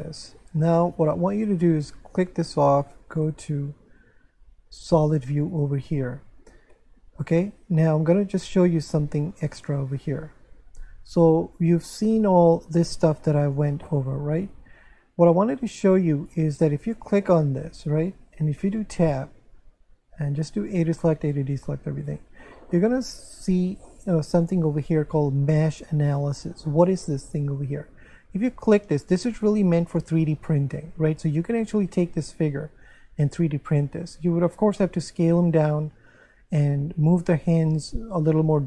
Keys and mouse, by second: 2.0 click, 3.1 click, 4.9 click, 9.3 click, 13.4 click, 16.8 right click, 18.6 Tab, 20.3 a, 24.4 click, 28.6 click.